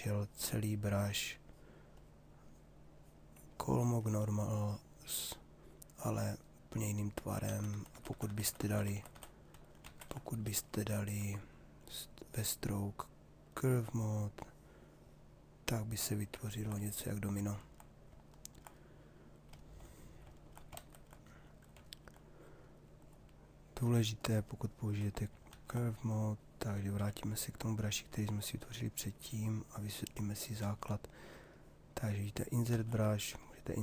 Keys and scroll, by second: 7.1 ctrl+z, 20.3 ctrl+z, 25.1 ctrl+z, 26.9 b, 30.6 ctrl+z.